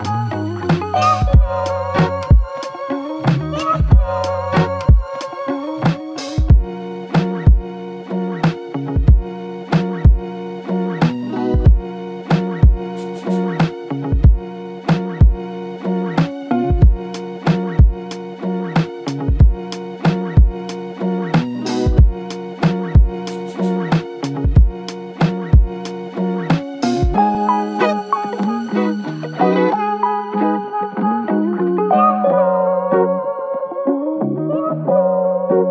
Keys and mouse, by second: 0.9 shift+click, 5.8 ctrl+alt+click, 10.7 typing, 11.9 alt+shift+click, 15.1 double click, 25.3 double click, 35.1 alt+click.